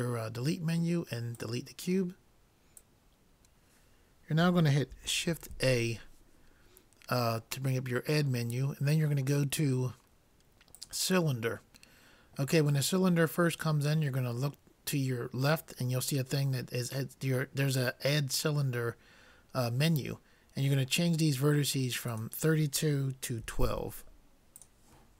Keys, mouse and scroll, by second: 5.4 shift+a, 22.1-23.9 drag.